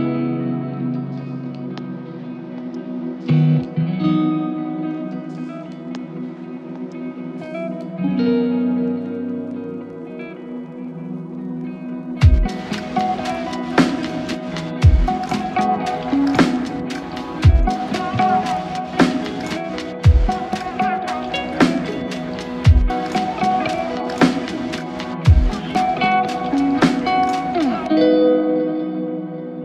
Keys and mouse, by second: 13.7 ctrl+click, 14.7 alt+click, 27.5 alt+click.